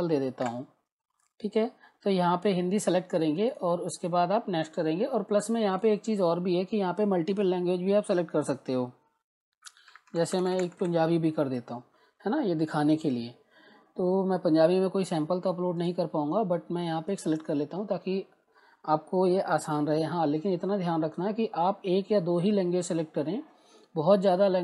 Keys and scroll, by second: 0.0-0.1 typing, 0.4 Return, 9.7-11.3 typing.